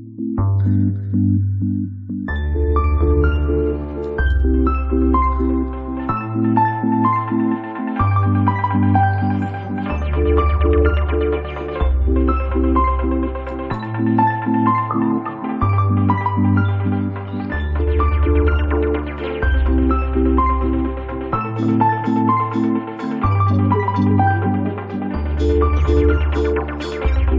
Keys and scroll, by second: 4.9 space, 6.5 ctrl+shift+q, 8.0 ctrl+shift+q, 9.7 ctrl+shift+q, 11.4 space.